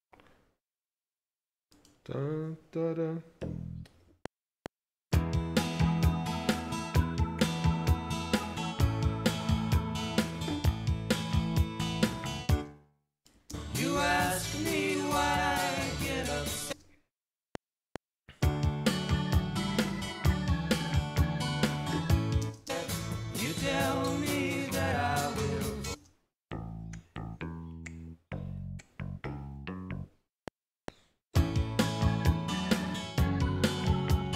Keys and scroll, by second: 4.1 F7, 12.5 space, 16.8 space, 17.4 F7, 22.4 space, 26.0 space, 30.3 F7.